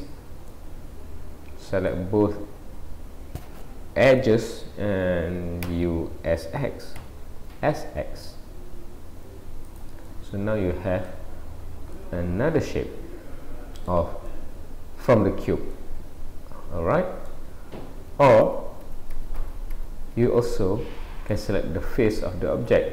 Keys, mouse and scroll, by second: 0.5-0.8 scroll up 1, 0.8 middle click, 10.1 middle click, 11.6-12.5 scroll down 3, 12.0 middle click, 14.3 middle click, 15.7 middle click, 18.1 ctrl+z, 18.5 ctrl+z, 18.9 ctrl+z, 19.2 ctrl+z, 19.5 ctrl+z, 19.7 ctrl+z, 20.5 middle click, 22.8-22.9 scroll up 6.